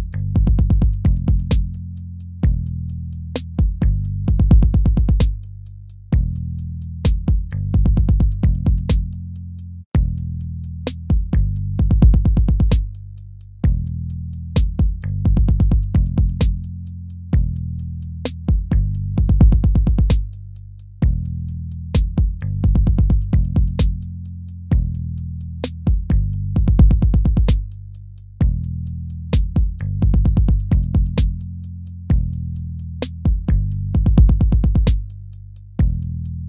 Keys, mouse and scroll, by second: 3.0 right click, 10.3 ctrl+-, 13.0 ctrl+-, 14.2 BackSpace, 14.7 BackSpace, 15.1 BackSpace, 15.3 ctrl++, 15.7 ctrl++, 16.1 ctrl++, 21.4 ctrl+-, 25.0 ctrl+-, 25.2 ctrl+-, 27.4 ctrl++, 32.6 ctrl+-, 32.9 ctrl+-, 33.6 ctrl+-.